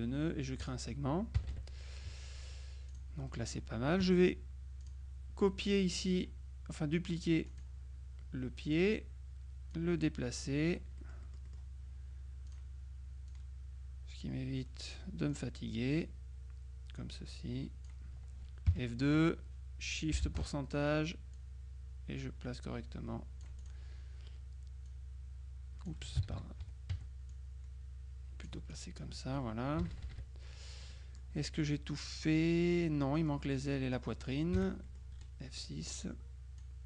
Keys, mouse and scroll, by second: 0.7 click, 1.5 KP_Subtract, 3.0 click, 3.4 right click, 4.9 click, 7.6 click, 8.8 click, 9.8-12.2 drag, 11.1-12.2 right drag, 12.6 click, 13.4-15.5 drag, 18.8 F2, 21.4-24.3 drag, 25.0-26.4 drag, 26.3 ctrl+z, 27.4 F1, 27.4-29.4 drag, 29.9 KP_Subtract, 31.0-32.2 drag, 32.8-33.8 drag, 33.9 click, 34.6 F6, 34.9 click, 36.0-36.8 drag.